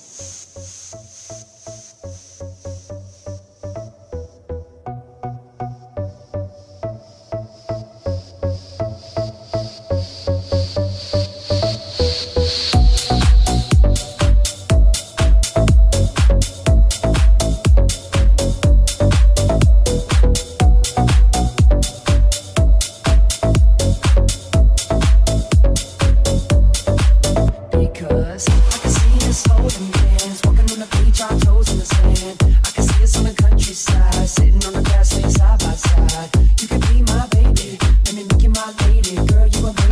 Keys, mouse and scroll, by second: 3.7 c, 4.8 alt+z, 5.7 alt+z, 8.1-31.3 drag, 13.0 Tab, 15.6 Tab, 16.5 Tab, 18.0 alt+z, 18.0 middle click, 18.0 right click, 21.7 shift+middle click, 21.7 shift+right click, 22.2 shift+middle click, 22.2 shift+right click, 22.7 shift+middle click, 22.7 shift+right click, 23.2 shift+middle click, 23.2 shift+right click, 24.5 shift+middle click, 24.5 shift+right click, 28.8 /, 28.8 alt+z, 29.2 alt+z, 29.2 /, 30.0 Tab, 33.0 shift+click, 34.0 click, 36.4-39.9 ctrl+drag, 38.7 right click.